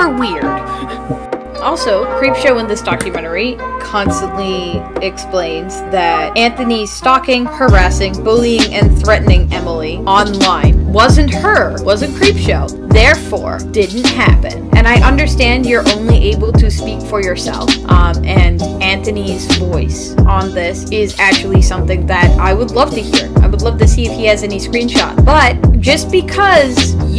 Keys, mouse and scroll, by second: 19.2 e, 19.6 p, 21.8 e, 22.4 p, 24.9 right click.